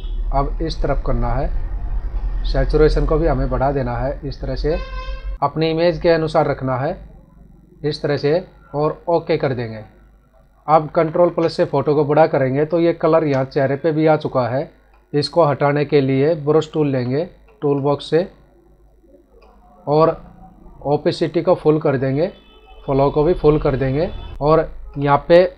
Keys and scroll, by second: 10.8 ctrl+=, 11.8 space, 24.3 ctrl+alt+z.